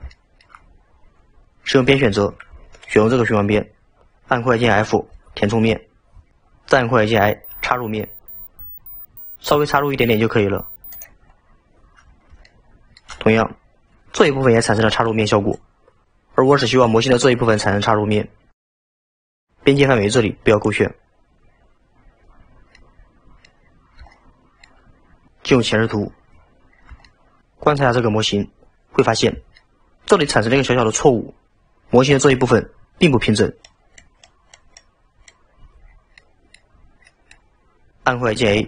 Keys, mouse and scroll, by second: 0.2-0.7 shift+middle drag, 0.7-1.9 scroll down 2, 1.9 2, 2.8 alt+click, 5.1 f, 11.4-11.8 scroll up 5, 12.5-18.8 shift+middle drag, 20.6 click, 22.4-22.8 scroll down 5, 22.8-23.7 middle drag, 23.7-24.1 scroll up 2, 24.1-25.3 shift+middle drag, 25.5 KP_1, 26.7-27.1 scroll up 2, 27.1 shift+middle click, 29.1-29.7 scroll up 4, 29.7-31.5 shift+middle drag, 35.9 scroll down 4, 36.2-36.8 middle drag, 36.8-37.1 scroll down 4, 37.1 middle click.